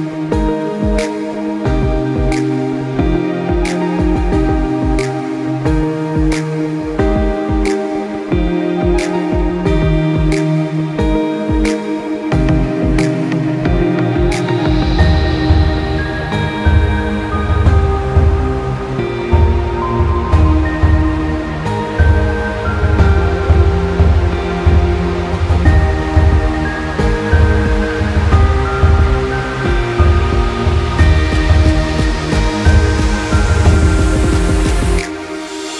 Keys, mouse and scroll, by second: 3.1 shift+Num_Lock, 4.1 click, 8.3 click, 9.7 click, 9.9 right click, 10.7 click, 14.3 click, 15.6 click, 18.0 ctrl+click, 18.5 click, 21.6 click, 22.0 KP_8, 22.3 KP_Enter, 23.0 click, 25.9 alt+Num_Lock, 26.0 alt+scroll up 1, 26.7 click, 27.5 Down, 29.4 click, 32.6 click.